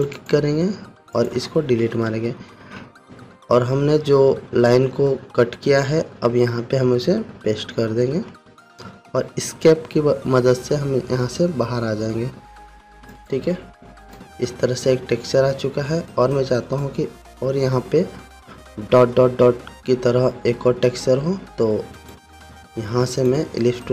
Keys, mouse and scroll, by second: 2.6 Delete, 7.9 ctrl+f, 11.7 Escape, 13.6 click, 16.8 scroll down 1, 17.1-18.0 scroll up 1, 19.8-20.2 scroll down 1, 21.1-22.5 scroll down 1, 22.5 right click, 23.7 click.